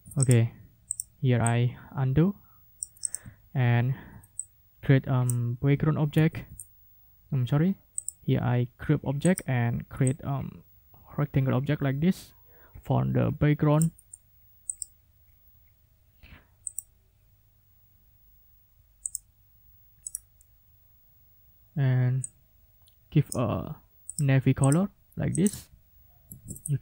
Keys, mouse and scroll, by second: 0.2 ctrl+click, 0.9 click, 1.4-2.9 drag, 3.0 ctrl+click, 3.4 ctrl+scroll down 2, 4.4-5.4 ctrl+drag, 6.1 ctrl+g, 8.0 click, 9.2 click, 10.0-13.9 ctrl+drag, 14.7 click, 16.7 click, 19.0 click, 19.5 middle click, 20.0 right click, 22.2-23.5 drag, 24.1 click, 24.6 click, 25.3 ctrl+click, 26.2 ctrl+shift+f.